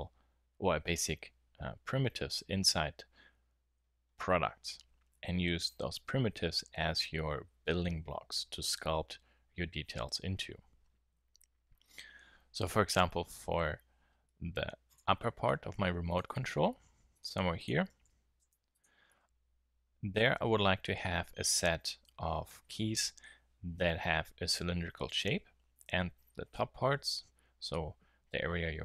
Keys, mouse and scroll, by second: 15.5 middle click, 15.7-16.0 middle drag, 16.3 Tab, 17.9 shift+s, 19.1 Tab.